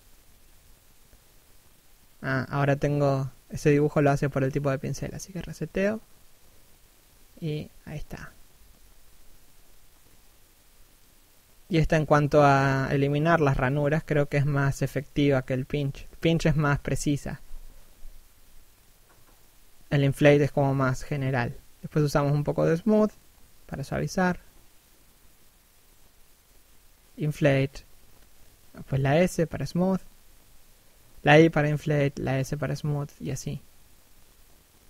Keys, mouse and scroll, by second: 4.4 right click, 4.8 click, 6.4 shift+middle click, 7.1 click, 8.1 shift+middle click, 8.4 click, 10.8 scroll down 1, 11.3 middle click, 13.4 click, 14.6 middle click, 15.2 scroll up 1, 15.4 middle click, 15.9 click, 17.3 middle click, 18.2-19.1 scroll up 1, 19.1 s, 19.4-19.8 scroll down 1, 19.8 click, 21.0 click, 22.5 shift+middle click, 24.1 click, 27.6 click, 29.4-30.6 scroll down 1, 30.6 middle click, 31.0 scroll down 1, 31.1 middle click, 32.4 scroll down 1, 32.7 middle click.